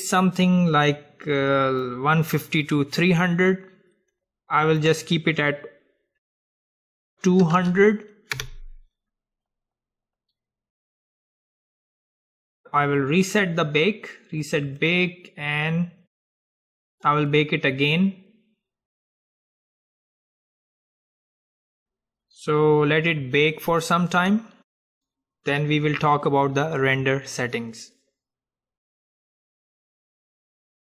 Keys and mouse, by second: 7.7 KP_0, 13.4-15.4 drag, 19.5-21.6 drag.